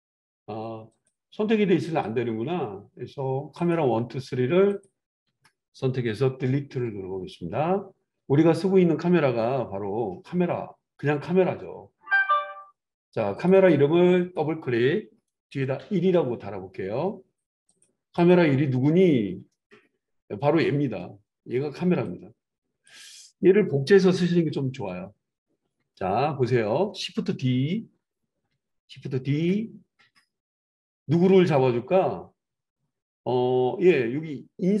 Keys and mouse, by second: 1.0-3.7 drag, 3.7-4.7 middle drag, 4.7 shift+click, 4.8-13.5 shift+middle drag, 6.7 Delete, 13.5-16.8 drag, 16.8-17.8 right drag, 17.8-22.0 middle drag, 22.0-22.4 drag, 22.4-25.6 right drag, 24.4 KP_7, 25.6-32.4 drag, 29.3 shift+d, 32.4-34.8 right drag.